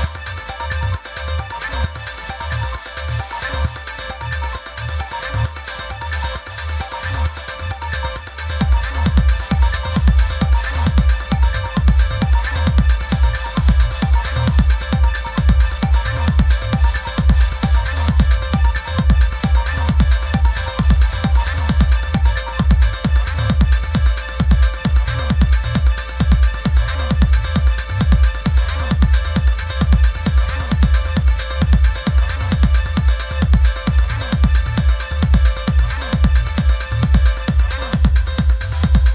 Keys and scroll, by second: 21.5 i, 24.6 super+[.